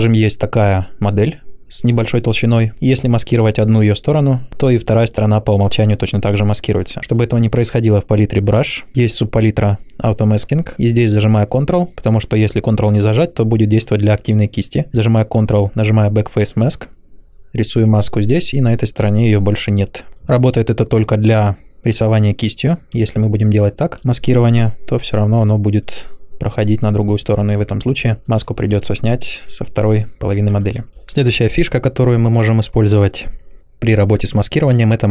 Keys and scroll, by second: 22.9 ctrl+space, 30.6 ctrl+z.